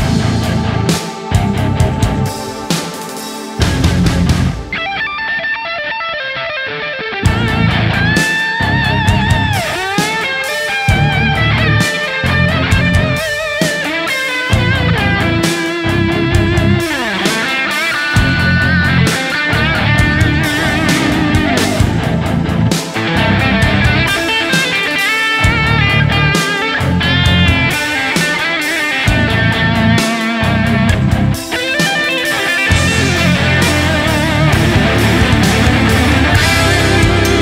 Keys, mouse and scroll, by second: 0.3 typing, 0.5 shift+click, 1.1 shift+click, 2.0 shift+click, 3.1 shift+right click, 5.8 ctrl+click, 6.5 ctrl+z, 6.8 ctrl+click, 7.5 ctrl+click, 9.0 ctrl+click, 11.2 ctrl+click, 11.5 w, 12.8 right click, 13.8 ctrl+click, 15.6 typing, 16.1 right click, 16.8 alt+right click, 17.3 ctrl+click, 21.2 ctrl+click, 21.8 ctrl+z, 26.9 right click, 27.9 w, 28.1 alt+right click, 34.3 s.